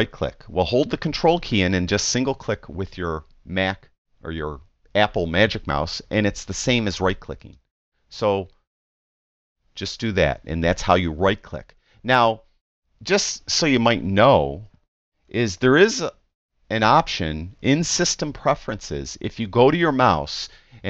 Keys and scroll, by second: 15.3 super+m.